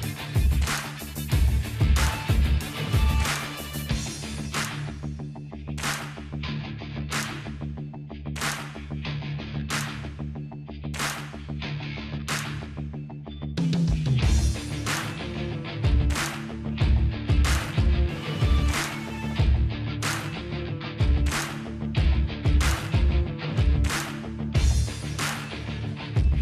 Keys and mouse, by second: 0.0 click, 0.3 middle click, 3.8 ctrl+z, 3.8 middle click, 3.9 ctrl+z, 4.1 ctrl+z, 4.2 ctrl+z, 4.4 ctrl+z, 4.6 ctrl+z, 4.8-6.2 middle drag, 6.5-9.0 drag, 8.2-10.6 middle drag, 10.3-11.3 drag, 10.8-12.1 middle drag, 10.8 right click, 11.5-12.5 drag, 11.5 right click, 12.7-13.7 drag, 13.9 click, 13.9-15.2 middle drag, 13.9 right click, 14.6 ctrl+b, 16.9-19.0 drag, 18.2 right click, 19.0 middle click, 19.1 click, 19.1 right click, 19.7 ctrl+b, 21.9-23.0 drag, 22.3 right click, 23.0 middle click, 23.1-25.2 drag, 23.1-25.2 right drag, 23.9 alt+h, 24.8 alt+v, 25.2-26.4 middle drag.